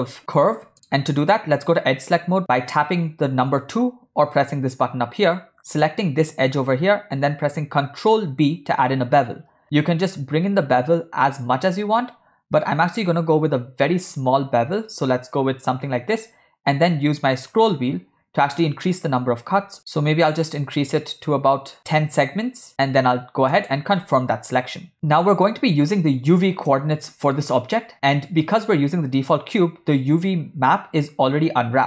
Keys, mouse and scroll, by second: 0.7 middle click, 2.4 2, 5.8 click, 8.1 ctrl+b, 24.9 Tab, 24.9-26.4 middle drag, 26.9 ctrl+middle click.